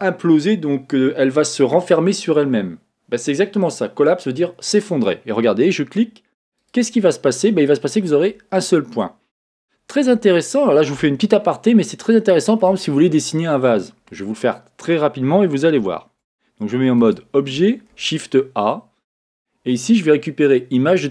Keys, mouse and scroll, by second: 4.5-17.5 middle drag, 17.0 Tab, 17.9-21.1 middle drag, 17.9 shift+a.